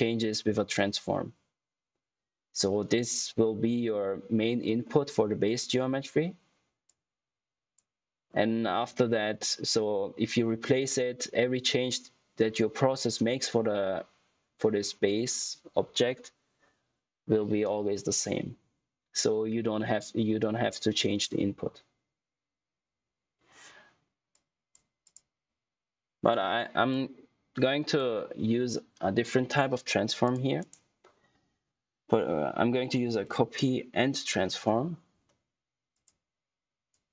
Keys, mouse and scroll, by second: 2.5 click, 2.7 typing, 6.8 click, 24.2 click, 27.1 click, 30.5 right click, 32.6-33.7 typing, 34.6 Return, 35.8 click.